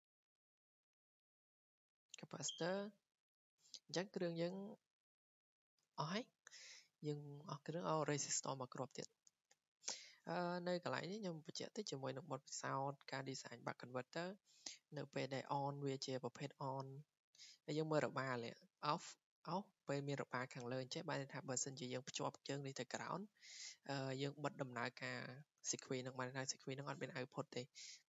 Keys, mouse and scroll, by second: 0.3 click, 0.7 Escape, 0.9 Escape, 2.5 click, 2.7 Escape, 3.6 click, 4.1 click, 5.3 click, 5.8 click, 9.1 click, 10.8 click, 11.5 click.